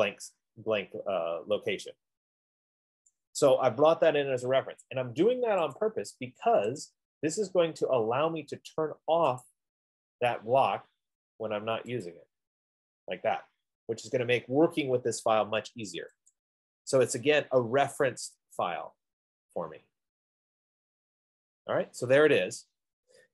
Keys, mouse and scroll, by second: 3.3 right click, 3.8-5.1 scroll, 12.3-14.7 drag, 16.8 click, 18.7 click, 19.4-21.7 drag, 22.7 right click.